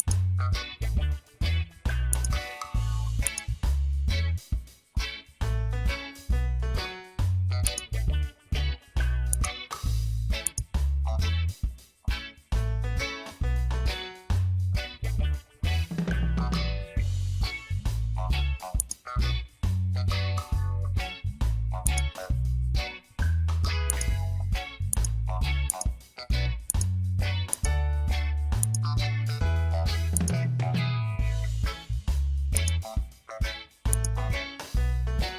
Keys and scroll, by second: 15.2 Return, 33.6 space.